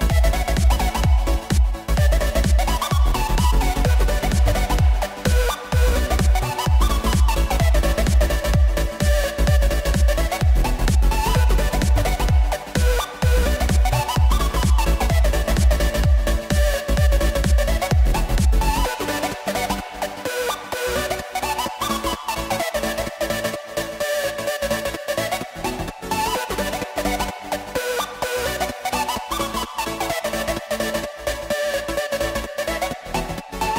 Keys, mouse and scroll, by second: 0.1 scroll down 1, 0.3-2.9 shift+middle drag, 2.9 Tab, 3.8 ctrl+r, 6.3 ctrl+r, 10.8 middle click, 11.6 click, 12.4 click, 13.6 shift+click, 14.1 shift+click, 15.4 click, 16.3 KP_1, 16.6 KP_3, 18.3 click, 20.3 ctrl+b, 21.7 ctrl+z, 22.3-24.6 middle drag, 25.4 click, 27.2 KP_1, 27.6 KP_3, 28.3 e, 32.9-33.7 middle drag.